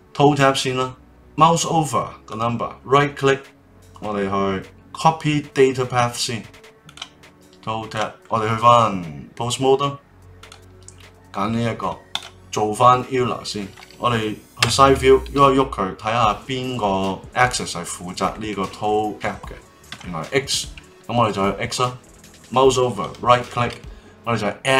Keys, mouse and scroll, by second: 2.2-7.8 right drag, 7.8 click, 8.1-10.4 middle drag, 10.4 click, 12.0-13.9 drag, 14.6 KP_3, 15.3 r, 23.0-24.7 right drag.